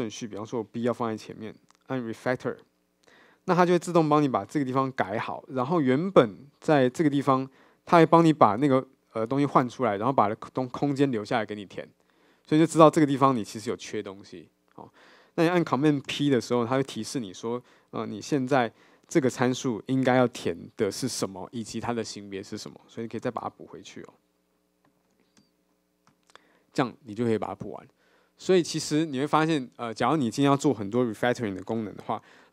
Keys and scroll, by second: 16.1 super+p.